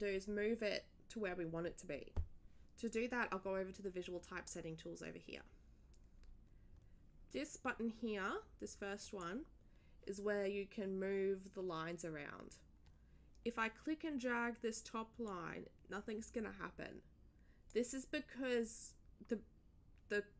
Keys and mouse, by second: 9.0 click, 15.3-17.7 drag.